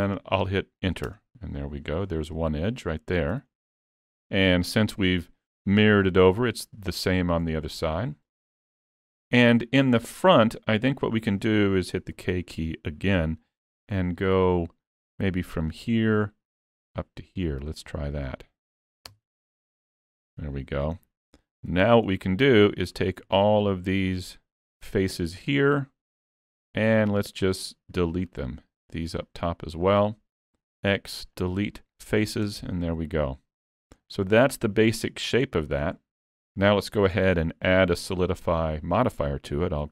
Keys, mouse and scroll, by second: 4.1 middle click, 7.6 middle click, 8.4 shift+middle click, 10.4 middle click, 20.1 alt+a, 21.7 3, 22.0 middle click, 22.8 click, 23.6 shift+click, 25.0 middle click, 28.2 shift+click, 29.2 middle click, 30.8 x, 32.5 Tab, 32.9 middle click, 34.0-34.4 scroll down 2, 34.4 middle click, 36.0 shift+middle click, 36.7 middle click.